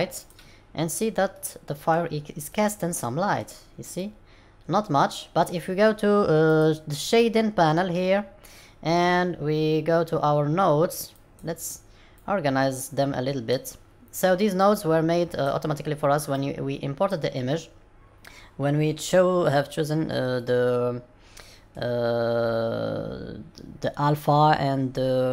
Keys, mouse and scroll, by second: 0.1 click, 1.2 middle click, 2.4 middle click, 3.9 middle click.